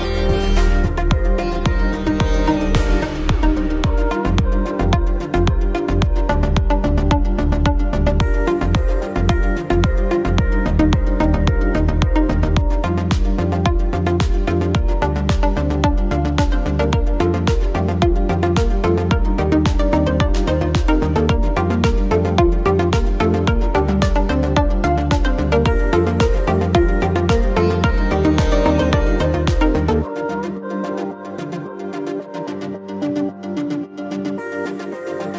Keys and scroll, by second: 6.2 shift+space, 29.2 Return.